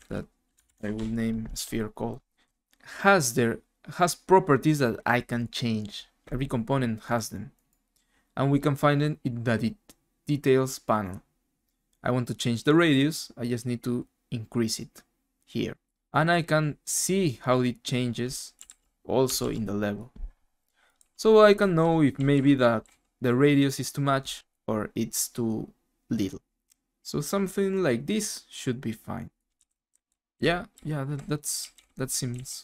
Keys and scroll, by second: 0.4-1.4 typing, 1.5 Return, 18.3-19.9 typing, 20.9-23.7 typing, 29.3-32.3 typing.